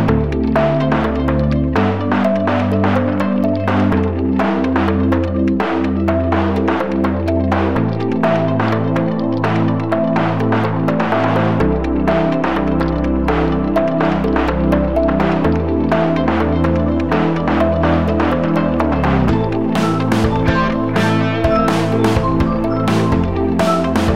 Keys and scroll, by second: 0.4 space, 2.9 ctrl+j, 4.1 ctrl+], 9.2 space, 9.5 space, 11.1 ctrl+c, 11.8 ctrl+z, 12.1 ctrl+z, 12.4 v, 12.7 space, 14.2 v, 17.1 v, 17.7 space, 18.1 space, 21.7-22.9 typing, 23.4 alt+a.